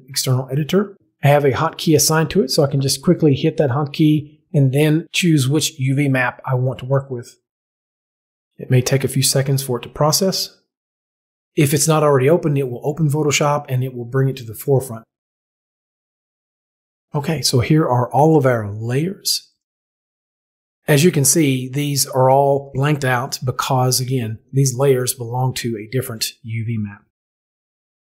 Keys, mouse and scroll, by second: 2.5 p, 4.6 click, 6.5 click, 15.2 click, 19.6 click.